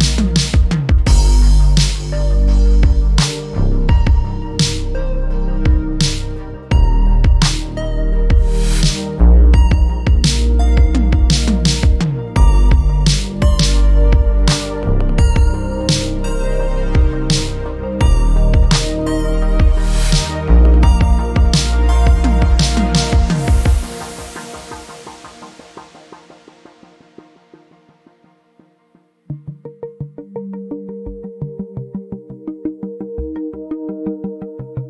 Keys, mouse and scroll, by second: 2.3 ctrl+z, 2.4 ctrl+z, 3.4 click, 3.7-4.8 shift+middle drag, 4.8 click, 5.3 click, 5.7 shift+click, 6.2 s, 8.1 shift+middle click, 8.6 click, 9.0 shift+click, 9.6 s, 11.7 click, 12.0 shift+click, 12.7 s, 15.0 click, 15.6 shift+click, 16.3 s, 18.0 click, 18.5 shift+click, 19.1 s, 24.3 click, 25.2 click, 25.7 shift+click, 26.2 s, 28.1 click, 28.9 click, 30.0 click, 31.4 Tab, 32.0 Tab, 32.5 click, 33.1 shift+click, 33.7 s.